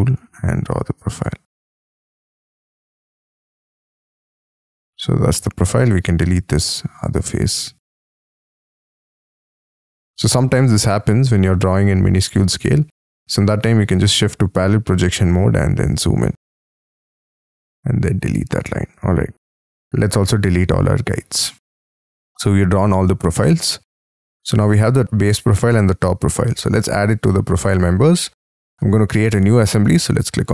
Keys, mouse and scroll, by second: 2.5 space, 2.8 j, 3.8 double click, 4.5 g, 6.1-6.5 scroll up 4, 6.5-7.1 scroll down 9, 7.2-7.7 scroll up 4, 7.7 scroll down 2, 8.1-8.9 scroll up 13, 9.1-9.6 scroll down 2, 10.4 middle click, 10.8-11.4 scroll down 9, 11.5-13.0 scroll up 11, 13.0 alt+w, 13.7 scroll up 6, 14.0 scroll down 1, 14.4-16.7 scroll up 50, 16.7 e, 17.7-18.3 scroll down 12, 18.3 space, 18.9 double click, 21.0-22.6 scroll down 28, 22.6-23.3 scroll up 11, 23.4-24.1 scroll down 10, 24.1 scroll up 6.